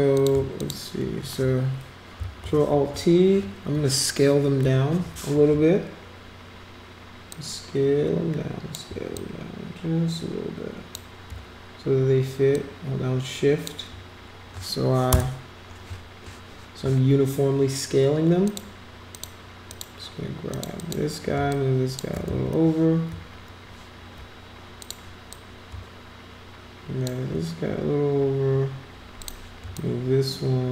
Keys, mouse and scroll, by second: 0.1 click, 0.6 shift+click, 7.3-8.7 shift+drag, 9.2-10.9 drag, 12.5-13.7 shift+drag, 18.4 click, 19.1 click, 19.7 click, 20.5 click, 20.8 click, 21.5 shift+click, 22.2 ctrl+z, 24.8 click, 25.3-27.0 drag, 29.2 click, 29.7-30.7 shift+drag.